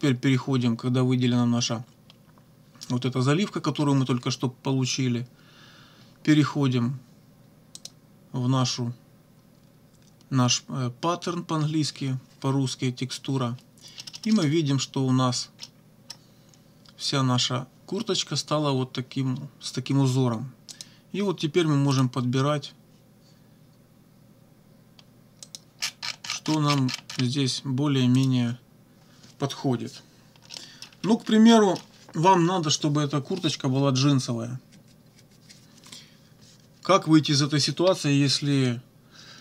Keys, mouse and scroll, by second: 7.8 click, 14.0 click, 15.6 click, 20.7 click, 22.0 click, 25.4 click, 28.2 click, 30.5 middle click, 30.9 -, 31.5 middle click.